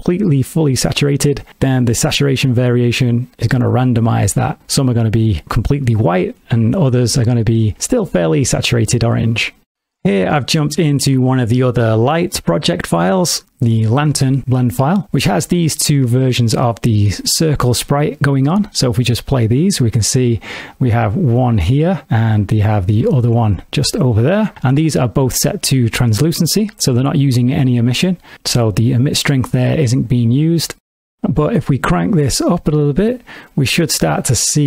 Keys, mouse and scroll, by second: 2.2 click, 10.5 click, 18.9 space, 20.4 g, 22.7 right click, 23.3 click, 23.8 g, 24.8 right click, 30.0 middle click, 30.3 ctrl+middle click, 32.0 click.